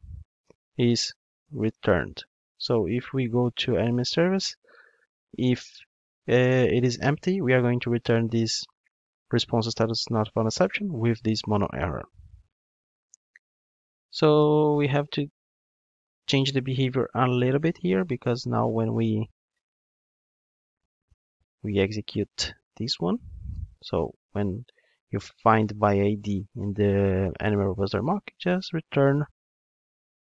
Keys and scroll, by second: 3.1 ctrl+Tab, 11.4 ctrl+Tab, 20.0 super+c.